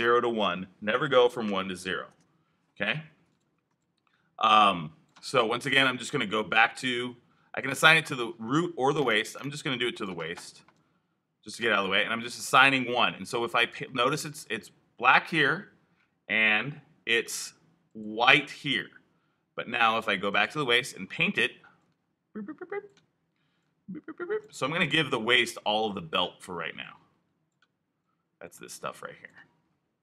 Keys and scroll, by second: 1.4 i.